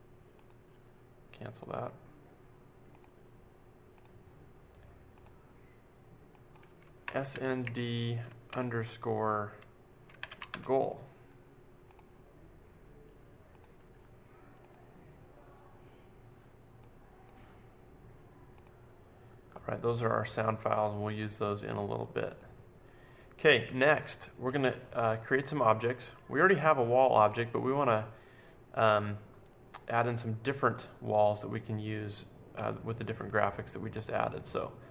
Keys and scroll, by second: 7.0-8.4 typing, 9.9-10.9 typing.